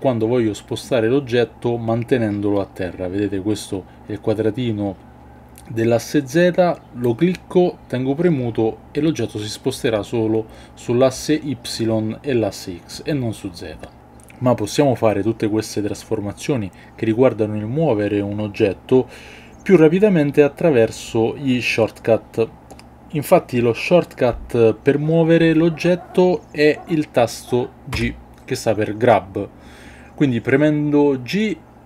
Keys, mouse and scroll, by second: 27.9 g.